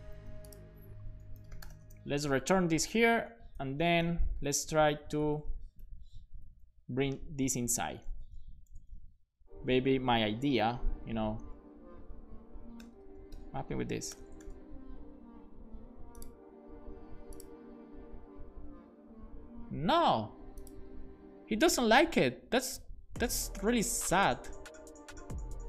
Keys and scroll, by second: 0.2 super+x, 1.0-2.3 typing, 3.7 shift+0, 4.2 Up, 4.4 Up, 4.5 Up, 4.9 Up, 5.3 Right, 5.8 shift+9, 6.3 Up, 6.5 Up, 7.6 alt+Down, 8.1 super+s, 8.7 alt+shift+f, 10.6 Down, 10.9 Down, 11.0 Down, 12.3 Down, 12.4 Down, 12.8 BackSpace, 14.1 alt+shift+f, 14.4 super+s.